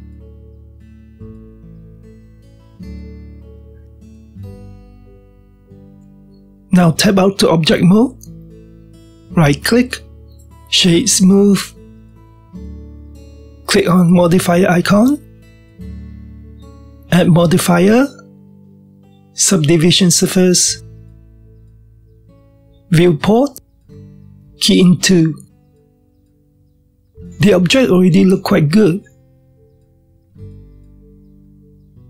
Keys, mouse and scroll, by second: 1.0-4.0 middle drag, 4.0-4.5 scroll down 1, 4.5 shift+middle click, 5.5-6.1 scroll down 1, 6.1-10.4 middle drag, 10.4 Tab, 10.9-13.3 right drag, 13.3-16.9 shift+middle drag, 17.1 click, 18.4 click, 20.7-21.5 drag, 23.9-26.9 drag, 27.8-28.5 scroll up 1, 28.5-32.0 shift+middle drag.